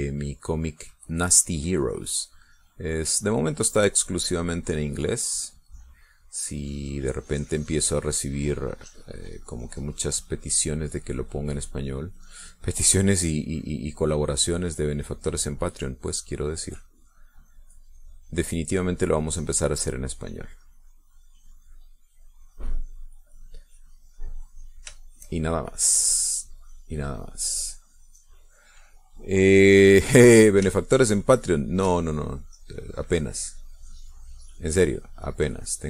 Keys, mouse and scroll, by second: 7.3-13.3 drag, 14.4-26.1 drag, 26.2-29.2 shift+drag, 31.1-32.8 middle drag, 33.7-35.8 drag.